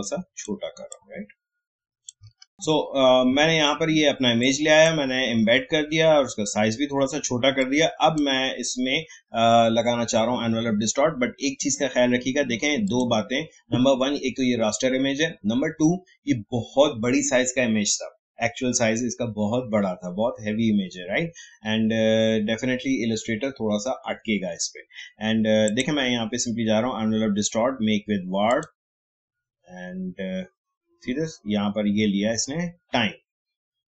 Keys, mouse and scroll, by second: 2.4 alt+scroll up 1, 4.4-7.4 drag, 7.6-10.5 drag, 12.8 click, 25.6 click, 28.4 click.